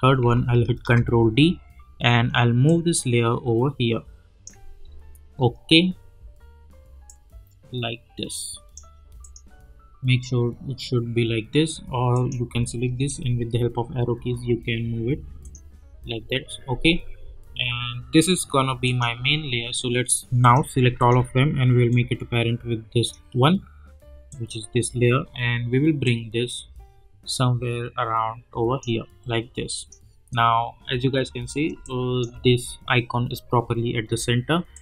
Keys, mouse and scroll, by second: 0.7 ctrl+d, 2.6-4.8 drag, 4.8-5.7 alt+scroll up 1, 7.0-9.2 drag, 10.1-11.9 scroll down 1, 12.1 click, 13.1 Left, 14.8 Right, 15.4 click, 18.8 click, 21.0 shift+click, 22.2-23.2 drag, 31.7 space, 31.8 click, 32.2 space, 34.7 click.